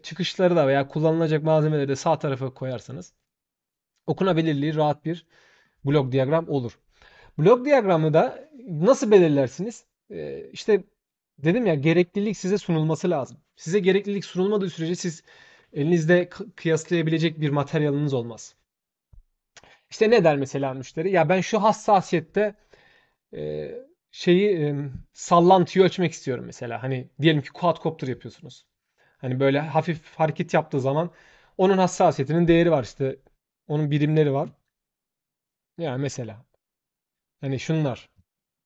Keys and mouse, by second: 2.9 shift+click, 38.3 ctrl+shift+middle click.